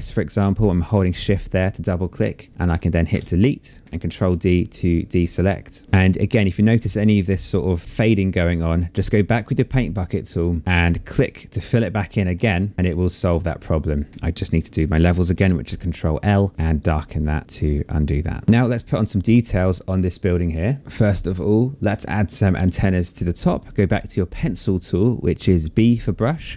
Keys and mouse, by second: 0.6 shift+click, 2.7 BackSpace, 3.6 ctrl+d, 8.9 click, 10.6 click, 14.9 ctrl+l, 16.5 click, 22.9 click.